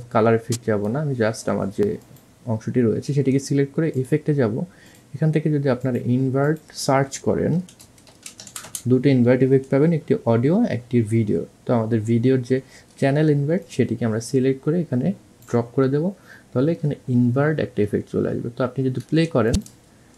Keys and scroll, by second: 8.4-9.0 typing.